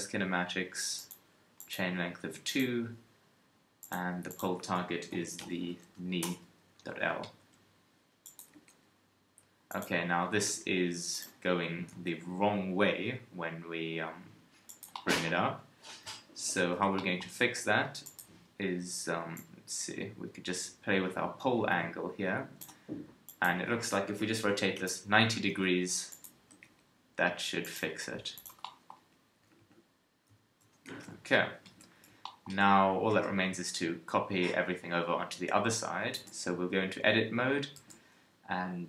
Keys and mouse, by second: 7.4 KP_3, 8.5 g, 9.8 KP_1, 10.4 g, 11.4 KP_3, 11.9 g, 16.4 alt+r, 16.6 alt+g, 23.2-25.2 drag, 25.5 KP_3, 26.1 click, 26.5 g, 27.9 r, 29.0 KP_1, 29.4 a, 29.6 a, 30.6 alt+r, 30.9 alt+g, 31.6 a, 36.1 Tab, 37.7 z.